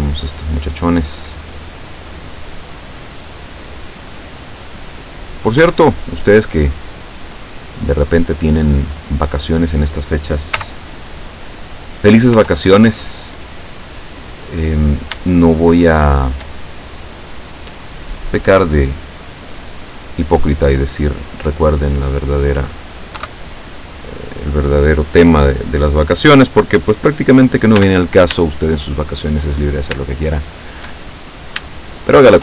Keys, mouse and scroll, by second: 5.7 Escape, 9.3 click, 10.7 z, 12.5 Tab, 13.3 scroll down 1, 14.1-14.8 scroll up 2, 15.5-16.6 shift+middle drag, 17.4 right click, 18.8 click, 19.8-22.8 middle drag, 23.2 KP_7, 27.8 z, 28.6-29.5 shift+middle drag, 29.6-30.0 shift+scroll down 1, 30.3-31.0 shift+middle drag, 31.1-31.9 shift+scroll up 1, 31.9-32.4 shift+middle drag.